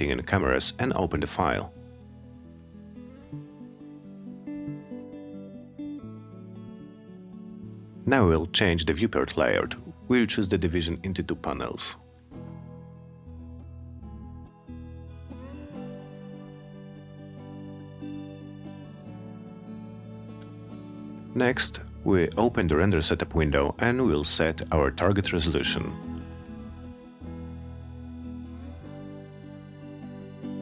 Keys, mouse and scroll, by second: 1.1 shift+click, 2.8 click, 9.5 click, 12.3 click, 15.6-16.6 middle drag, 17.0 click, 17.3 F3, 18.0 F10, 21.5 click, 22.9 click, 23.4-24.6 typing, 25.5 click, 26.1-27.7 typing, 28.3 click, 29.8 click.